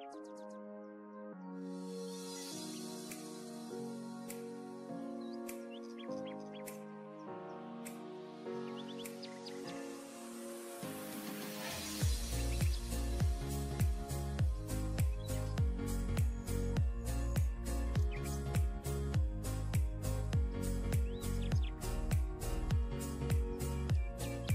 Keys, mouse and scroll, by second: 12.4 shift+click, 14.1 e.